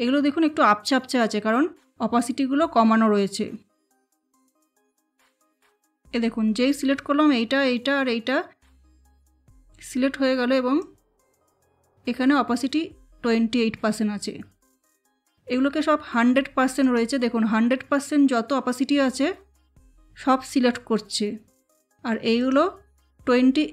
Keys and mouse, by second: 4.0 click, 10.8-16.8 drag, 22.3 click.